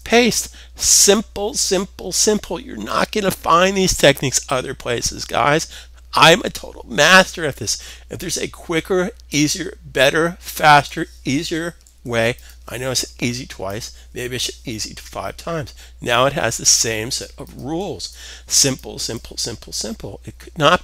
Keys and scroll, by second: 11.3 super+s, 17.5 super+s.